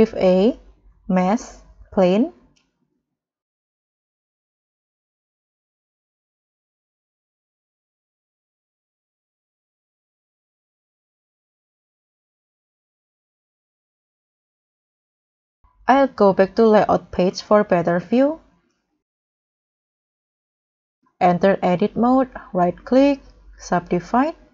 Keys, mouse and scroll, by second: 0.3 scroll up 1, 0.3 shift+a, 3.4-4.9 scroll down 8, 4.9 scroll up 1, 5.7 g, 7.5 x, 9.0 scroll down 1, 9.3 middle click, 9.6-10.7 scroll up 8, 10.7 scroll down 3, 11.0 scroll up 1, 11.6 scroll up 1, 11.9-12.4 scroll down 5, 12.4-12.7 scroll up 3, 12.7 middle click, 13.9-15.1 scroll up 1, 15.4-17.1 scroll up 12, 17.1 scroll up 1, 17.6-18.1 scroll down 7, 18.1-18.6 scroll up 7, 18.7 middle click, 18.9-19.3 scroll down 2, 19.4-19.8 scroll up 1, 19.8 middle click, 22.4 scroll down 2, 22.7 scroll up 2, 24.2 right click.